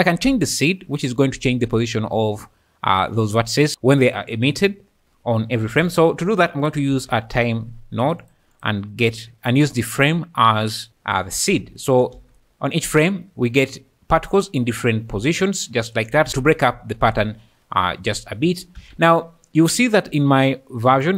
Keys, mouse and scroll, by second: 0.8-3.7 drag, 5.7 shift+a, 8.5 click, 9.5 click, 11.8 shift+click, 12.3 space, 18.8 Escape.